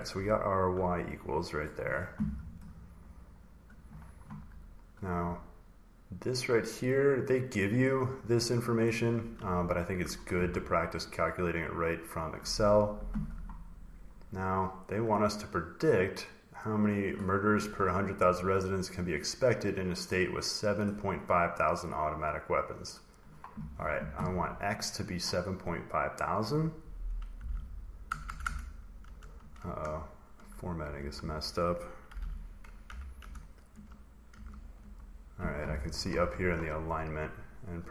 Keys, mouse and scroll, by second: 0.1-0.9 ctrl+scroll, 1.5 click, 2.1 scroll, 2.4 click, 2.7 scroll, 3.3 scroll, 6.8 click, 7.0 click, 7.4 click, 7.6 click, 7.7 click, 7.9 click, 8.1 click, 8.3 click, 8.5 click, 8.7 click, 9.6-9.9 ctrl+scroll, 11.8 click, 16.8 click, 20.6 click, 25.7 click, 26.2 click, 27.0-28.9 typing, 28.9 Delete, 30.2-34.1 typing, 34.2 Left, 34.7 Right.